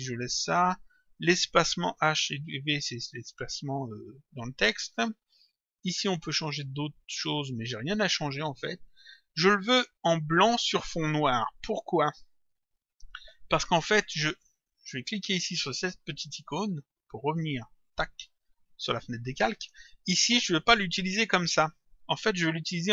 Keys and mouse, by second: 2.0 click, 13.9 click, 16.5 click, 17.9 click.